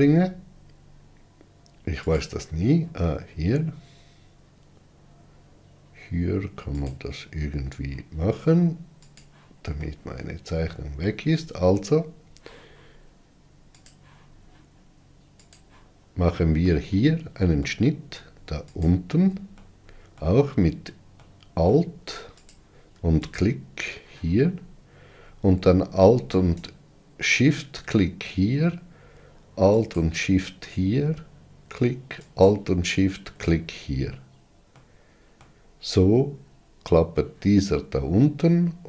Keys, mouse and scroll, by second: 9.4 click, 10.1-14.1 middle drag, 14.1 click, 15.7-17.0 drag, 17.0-19.0 middle drag, 19.0 alt+click, 19.9-22.7 middle drag, 22.7 click, 26.8 alt+shift+click, 30.2 alt+shift+click, 32.7 alt+shift+click, 35.1-38.8 middle drag.